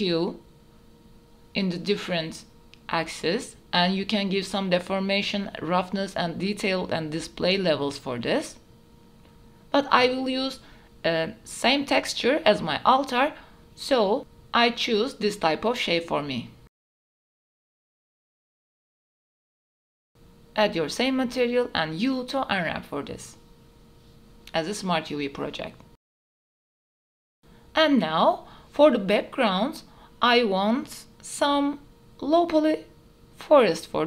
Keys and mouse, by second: 0.1 middle click, 1.2 click, 1.4 click, 2.6-4.7 drag, 5.5 click, 7.0 click, 8.3 middle click, 8.6 middle click, 9.0 middle click, 9.6 middle click, 9.9 middle click, 10.5 middle click, 10.8 middle click, 11.2 middle click, 11.7 click, 13.9-15.2 drag, 15.5 click, 16.7 click, 17.5 middle click, 17.8 middle click, 18.1-19.7 typing, 20.4 Tab, 20.7 a, 21.4 u, 23.9 Tab, 26.3 ctrl+shift+s, 26.4 shift+click, 27.1 click, 27.9 click, 29.4 click, 30.0 click.